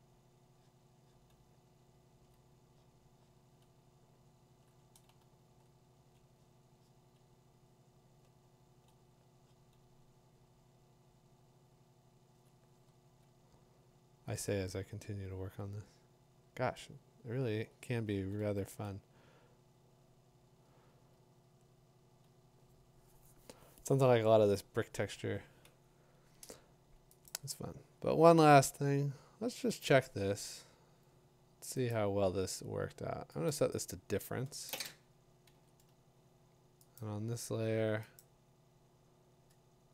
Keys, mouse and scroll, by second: 2.3 click, 4.6 click, 5.2 2, 5.5 3, 6.0 5, 6.7 9, 8.6 click, 8.9 click, 12.5 click, 12.9 click, 17.2 click, 17.6 click, 21.6 [, 27.3 click, 29.8 click, 30.4 scroll, 31.9 click, 33.3 middle click, 33.5 click, 35.5 click, 36.5 v, 37.0 click, 38.2 click.